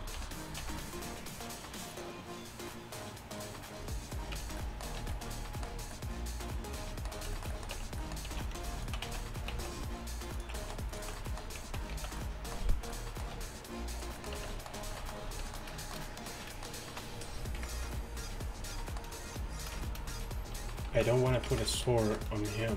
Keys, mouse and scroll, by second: 0.2 r, 4.4 Tab, 5.0 a, 7.8 Tab, 8.3 z, 9.1 z, 9.6 alt+s, 11.7 z, 12.0 z, 13.4 r, 14.4 Tab, 15.0 a, 15.4 a, 17.6 KP_1, 21.0 z, 21.5 z.